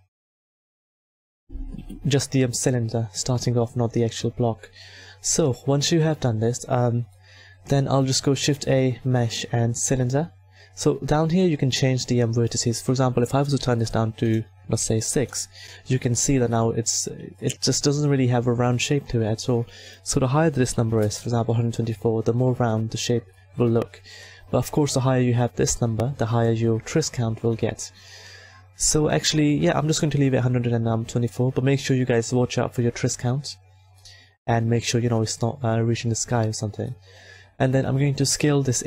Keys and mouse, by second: 1.7 KP_1, 8.2 shift+a, 12.3 click, 13.6-15.5 drag, 19.8-21.9 middle drag, 25.6-29.4 middle drag, 33.9 middle click, 38.4 s.